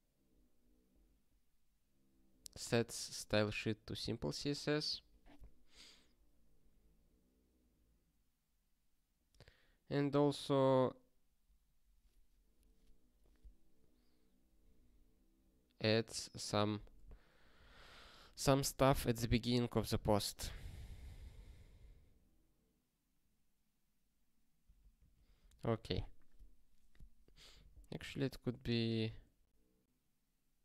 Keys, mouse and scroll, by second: 2.7 click, 2.9 double click, 3.8 click, 10.3 click, 16.2 click, 17.6 ctrl+b, 17.8 ctrl+b, 18.9 ctrl+alt+@, 19.3 ctrl+alt+@, 20.1 ctrl+g, 25.1 ctrl+s, 28.6 click.